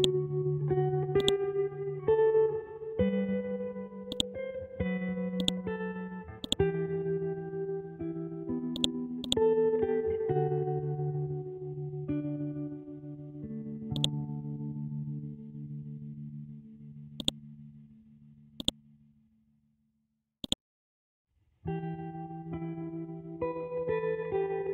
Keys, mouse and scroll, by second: 2.6 shift+Tab, 4.1 click, 8.7 click, 10.0 Up, 13.9 click, 17.2 click, 20.4 right click, 21.4 F12, 21.6 Tab, 23.2 Down.